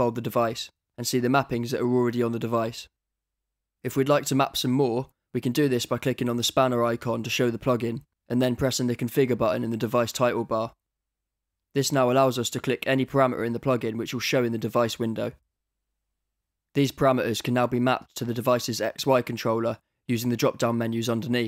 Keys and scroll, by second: 18.5 super+m.